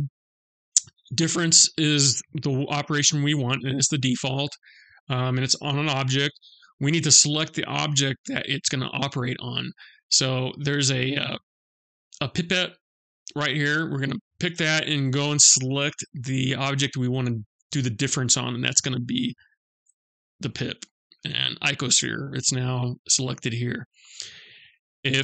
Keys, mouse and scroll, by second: 0.3 click, 10.9 click.